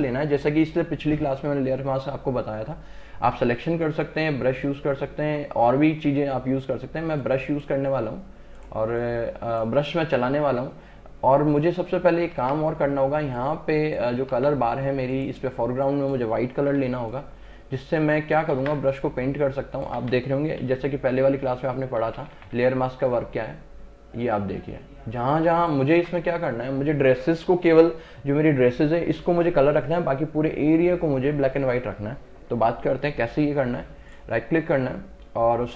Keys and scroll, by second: 12.4 Escape, 16.8 Return, 18.6 ctrl+alt+z, 20.0 ctrl+alt+z, 20.7 ], 22.1 [, 26.0 ctrl+alt+z.